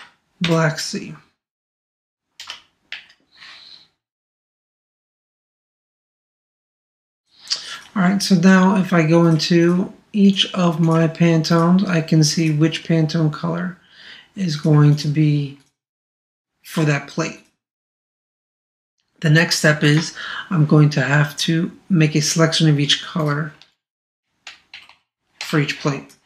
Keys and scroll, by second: 2.9 shift+b, 24.7 super+-.